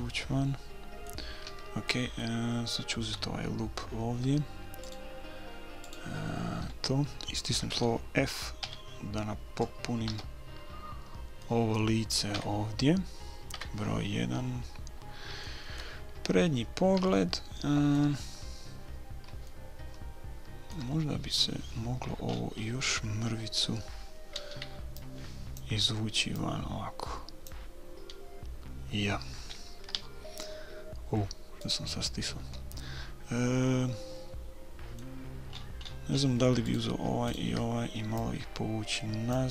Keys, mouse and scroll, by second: 0.1-3.9 middle drag, 0.6 click, 1.5 a, 4.8-7.6 right drag, 8.6 f, 10.1 a, 10.7 middle click, 12.3 KP_3, 13.1 middle click, 13.5 KP_1, 14.6 middle click, 18.9-21.2 middle drag, 22.0-25.6 middle drag, 24.8 b, 26.4-28.2 drag, 29.9 s, 32.7-34.8 middle drag, 35.5-36.7 middle drag, 36.7-39.0 right drag, 38.2-39.5 drag.